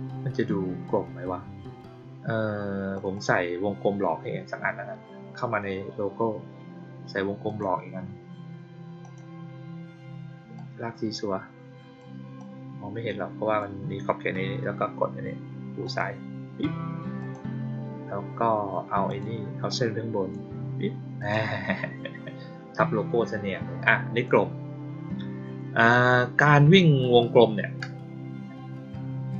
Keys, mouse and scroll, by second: 2.9 click, 3.1 click, 7.4 click, 8.9 click, 10.5-11.9 drag, 12.3-13.5 drag, 15.8 click, 17.1 click, 19.0 click, 19.6-20.2 drag, 21.1 click, 24.1 click.